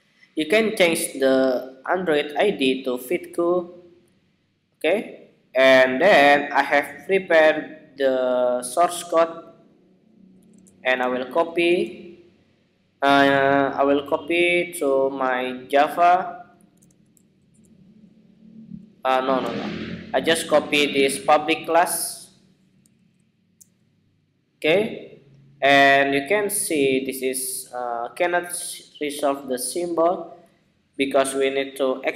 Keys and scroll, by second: 10.2 super+a, 11.2 super+c, 16.5 super+a, 16.9 super+v, 18.7 super+z, 22.6 super+v, 31.2 alt+Return.